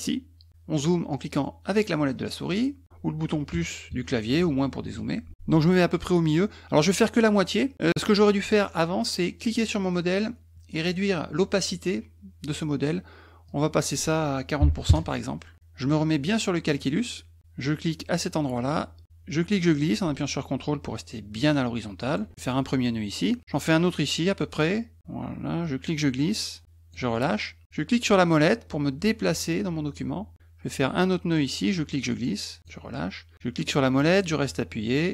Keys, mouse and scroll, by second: 1.9-2.6 scroll up 2, 9.4 click, 13.5 click, 16.7 click, 18.2-22.1 drag, 25.6-26.9 drag, 28.1-30.5 middle drag, 31.7 click, 33.6-35.1 middle drag.